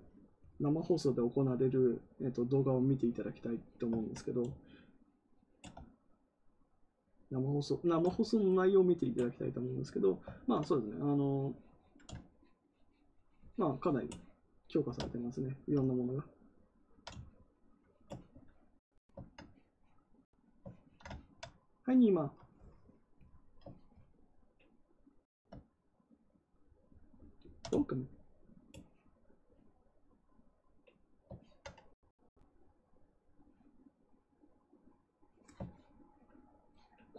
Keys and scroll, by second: 10.2 ctrl+z.